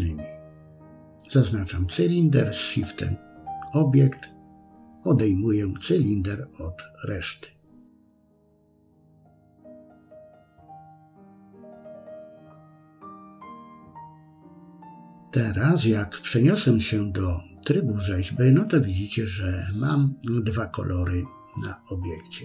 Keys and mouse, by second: 1.7 ctrl+shift+b, 10.1-10.9 middle drag, 11.3 middle click, 12.3 Tab, 16.3-17.4 middle drag, 19.2-20.3 middle drag.